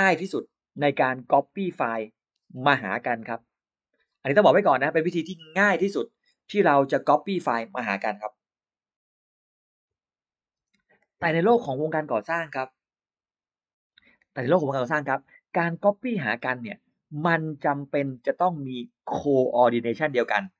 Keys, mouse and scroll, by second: 19.3 e, 19.4 click.